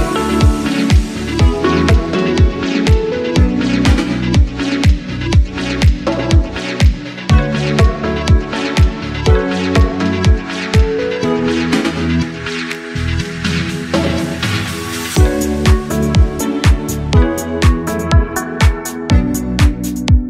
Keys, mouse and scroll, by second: 0.4-1.5 scroll up 2, 1.5 3, 2.1 click, 3.3 shift+d, 3.9 right click, 6.3-8.1 right drag, 9.5 click, 10.1 click, 11.2 click, 11.4-15.5 drag, 16.5-18.3 drag.